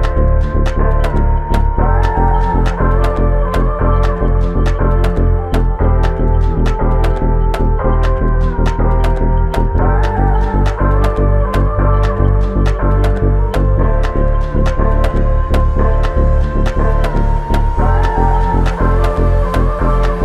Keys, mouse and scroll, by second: 2.4 double click, 4.0 shift+click, 8.3 double click, 13.1 ctrl+click, 15.5 ctrl+click, 18.3 ctrl+click, 18.8 ctrl+click, 19.9 shift+click.